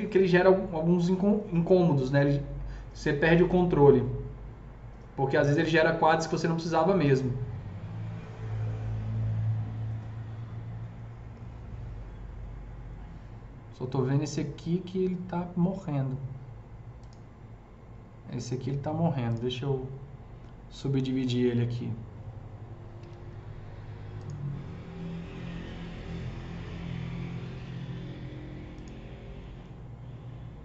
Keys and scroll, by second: 23.1 alt+c.